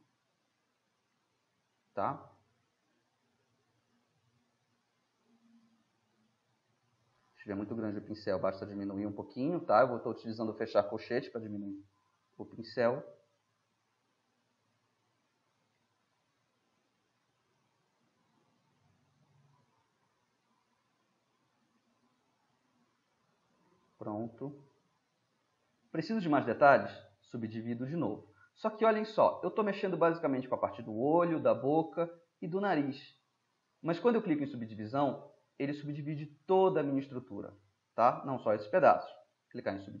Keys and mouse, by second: 1.2-3.3 middle drag, 3.9-7.0 drag, 7.0-7.8 middle drag, 7.8 [, 8.1 [, 10.8-15.9 drag, 15.9-17.1 middle drag, 17.9-20.1 drag, 20.1-21.6 middle drag, 22.1-23.3 drag, 23.3-24.5 middle drag, 24.7 middle drag, 25.0-25.8 middle drag, 27.3-32.2 middle drag, 32.9-37.6 middle drag, 37.6 middle click, 37.9 middle click, 39.6-40.0 middle drag.